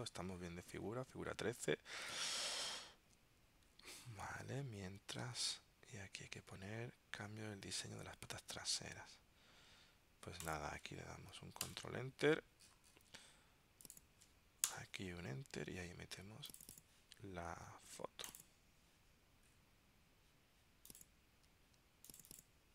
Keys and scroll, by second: 4.0 super+Tab, 5.3 super+Tab, 7.7 super+Tab, 11.8 super+Return.